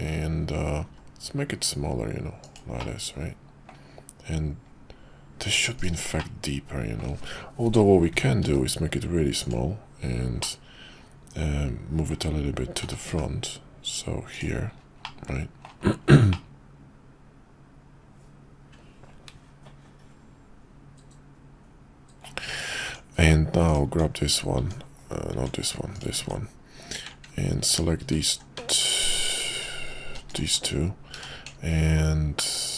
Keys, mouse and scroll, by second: 0.8 s, 2.8-3.6 middle drag, 5.8 right click, 6.2-7.1 middle drag, 8.4 s, 10.5-12.2 middle drag, 12.8 g, 15.0-15.7 middle drag, 16.5-22.2 middle drag, 22.8 Tab, 23.7 click, 25.9 click, 27.7 click, 31.1 q.